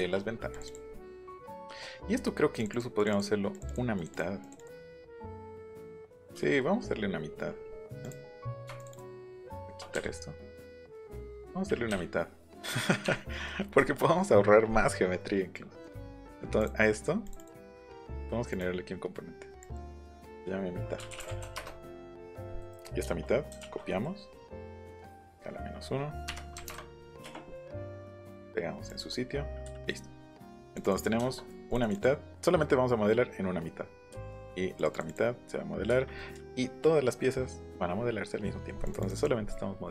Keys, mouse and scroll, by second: 0.0 shift+middle click, 0.5 middle click, 1.2 click, 1.4 click, 2.5 click, 2.7 click, 3.0 click, 3.5 click, 4.0 click, 4.1 click, 4.4 click, 4.9 click, 5.7 click, 6.1-6.5 scroll down 1, 6.6 middle click, 6.7 scroll down 1, 7.4 scroll up 1, 7.9 middle click, 8.8 shift+middle click, 9.5 shift+middle click, 9.9 Delete, 10.9 click, 11.9 Delete, 12.7 click, 13.8 shift+middle click, 15.8 middle click, 16.6 click, 17.2 click, 17.6 click, 18.5 right click, 19.6 click, 20.8-21.9 typing, 22.6 click, 23.0 shift+click, 24.9 s, 25.2 click, 26.3 KP_Subtract, 26.6 KP_1, 26.7 KP_Enter, 27.2 space, 28.1 click, 28.9 click, 29.8 middle click, 30.3 middle click, 30.7 click, 30.8 click, 31.2 shift+middle click, 31.7 click, 33.7 middle click, 34.8 click, 34.9 click, 35.1 click, 36.1 scroll down 1, 36.2 middle click, 36.3 Escape, 38.8 click, 39.2 click, 39.6 middle click, 39.6-39.9 scroll.